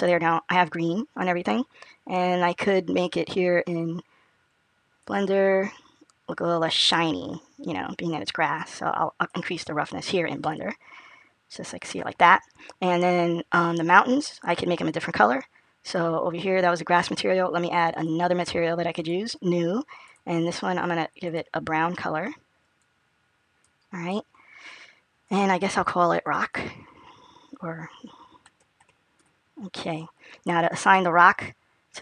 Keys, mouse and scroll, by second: 1.9-4.0 scroll down 1, 4.0-4.7 scroll down 2, 6.3 click, 10.3 middle click, 15.5-17.7 scroll up 1, 17.7 click, 17.7 scroll up 4, 20.1 click, 25.1 click, 25.6 click, 26.1 click, 30.8 middle click.